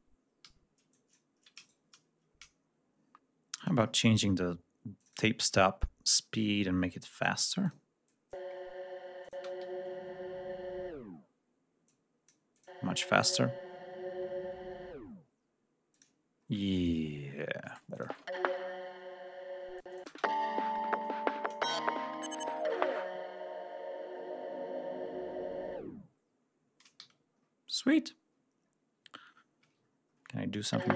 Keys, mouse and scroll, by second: 0.3 g, 0.7 click, 1.4 shift+right click, 2.5-3.0 scroll up 2, 3.4 click, 4.8 click, 6.2-7.2 drag, 7.5 click, 7.9-8.3 drag, 9.1 click, 9.2 space, 9.5 ctrl+scroll down 2, 11.7-12.3 drag, 12.4 click, 15.7 click, 16.9 ctrl+scroll down 1, 17.5 ctrl+space, 17.8 ctrl+click, 19.7 space, 19.8 click, 20.2 ctrl+scroll down 1, 21.3-21.7 ctrl+scroll up 1, 26.8 g, 27.1-28.5 scroll down 1, 28.5-29.3 scroll down 1, 29.7-30.3 ctrl+scroll up 3, 30.4 ctrl+click, 30.7 scroll up 2.